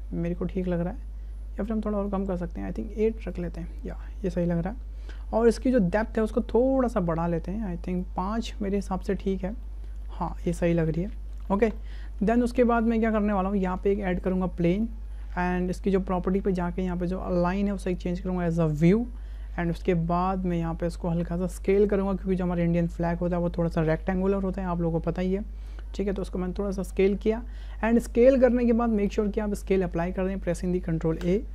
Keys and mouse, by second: 3.3 click, 5.5-8.0 drag, 8.6-9.2 shift+drag, 9.6 shift+drag, 10.1-10.4 shift+drag, 10.9-11.3 shift+drag, 11.7 shift+click, 12.3 shift+drag, 12.9 shift+click, 13.8 shift+a, 17.3-18.6 drag, 19.3-19.8 shift+drag, 20.5 click, 21.9-26.9 drag, 29.1 ctrl+a.